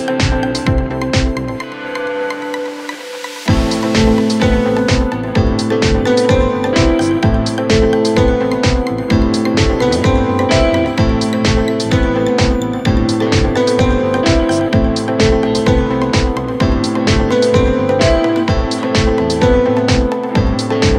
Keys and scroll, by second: 5.2 Delete, 11.0 ], 13.2 ], 17.0 ].